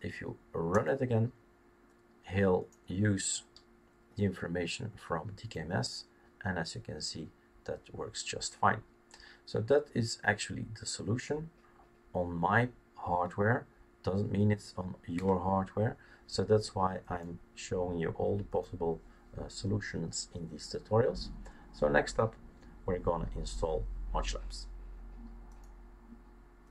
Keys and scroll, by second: 15.6 Down.